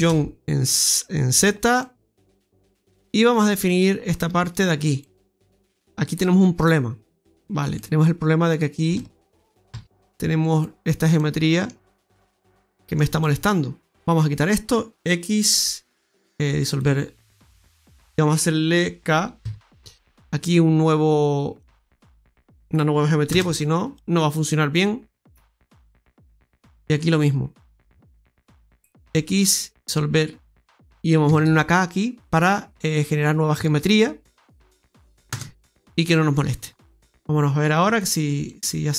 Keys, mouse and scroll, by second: 1.7 middle click, 2.4 middle click, 2.8-3.5 scroll up 2, 3.7 right click, 5.7 middle click, 6.5 middle click, 7.3 click, 7.3 middle click, 7.3-7.9 scroll up 4, 7.8 middle click, 8.9 shift+middle click, 10.4 click, 10.8-11.1 scroll down 2, 11.1 middle click, 11.8 middle click, 12.4 middle click, 13.1 middle click, 14.0 right click, 15.4 x, 17.3 middle click, 19.3 k, 23.4-23.8 scroll down 3, 23.8 middle click, 28.1 right click, 29.0 x, 31.2 k, 35.4-36.1 scroll down 3, 36.6-37.7 scroll up 3, 38.3 click, 38.4 click.